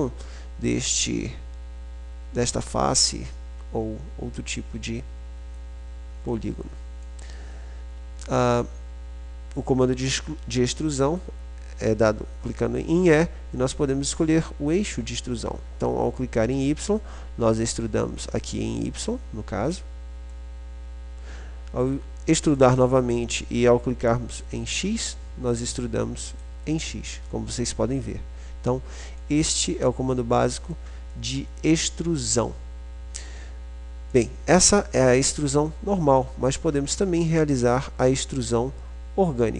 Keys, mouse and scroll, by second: 0.1-1.9 drag, 6.4 click, 11.3 e, 18.4 click, 18.8 right click, 19.3-20.6 middle drag, 22.8 e, 26.8 middle click, 26.9-28.1 drag, 28.1 middle click, 34.9-36.3 drag, 37.1 click, 39.3 click.